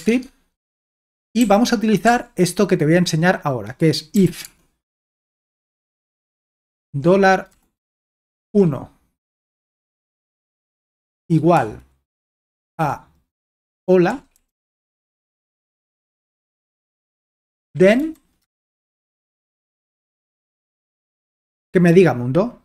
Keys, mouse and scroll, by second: 0.2 alt+Tab, 1.0-2.0 typing, 3.9-8.9 typing, 10.1-11.6 typing, 12.7-16.2 typing, 16.7 Return, 17.3-20.9 typing, 19.3 Escape.